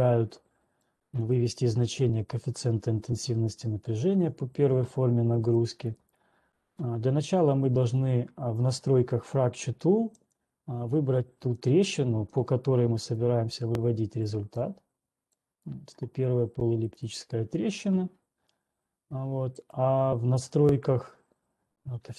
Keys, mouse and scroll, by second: 1.3 click, 5.8 click, 6.5 right click, 8.3 click, 10.8 click, 11.8 click, 13.4 click, 14.8 click, 15.8 click, 17.5 right click, 19.8 click.